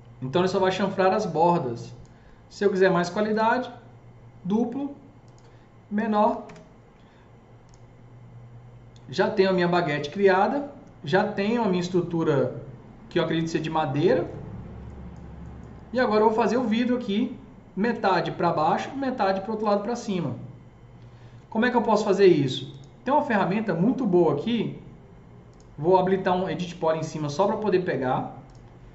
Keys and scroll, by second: 6.1 KP_1, 6.3 KP_5, 6.4 Return.